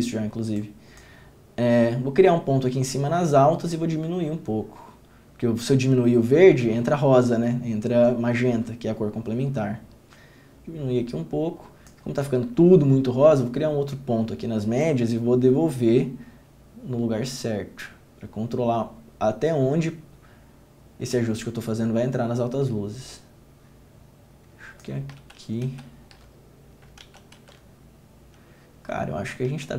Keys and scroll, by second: 25.4 ctrl+d, 25.8 ctrl+d, 27.2 ctrl+d, 27.5 ctrl+d.